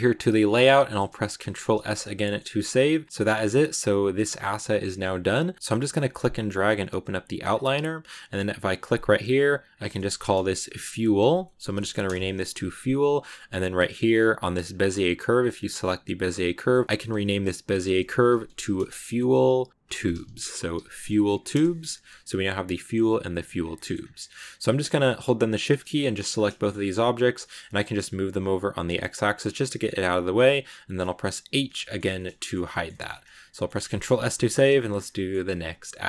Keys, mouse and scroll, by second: 0.0 click, 0.4 scroll down 3, 0.6-2.3 shift+middle drag, 2.3 scroll down 2, 2.5-7.4 middle drag, 7.4 click, 7.9 right click, 9.6-14.6 drag, 16.1-21.4 drag, 22.7 click, 23.2 click, 23.6 middle click, 23.8 scroll down 2, 24.0-25.4 middle drag, 25.4 shift+right click, 26.2-27.2 scroll down 6, 26.5 shift+middle click, 27.2 g, 29.4 scroll down 1, 29.5 g, 30.4 scroll up 1, 31.4 h, 31.7 shift+middle click, 32.0-33.4 scroll up 3, 32.0 shift+middle click, 32.6 middle click, 33.4-34.6 middle drag, 34.6 a, 35.0-36.0 shift+middle drag.